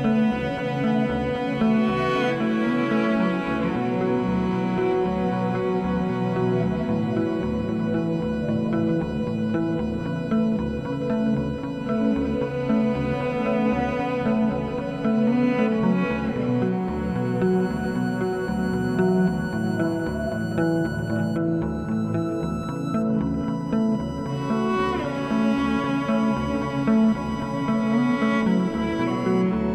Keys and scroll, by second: 0.0-1.0 typing, 16.0 2, 19.3 3, 22.6 s, 23.4 2.